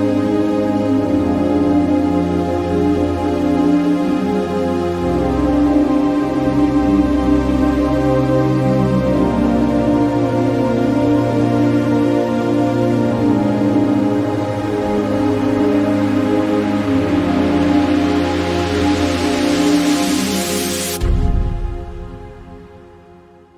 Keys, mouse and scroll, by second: 9.2 shift+click, 9.3 Left, 16.7-20.1 drag.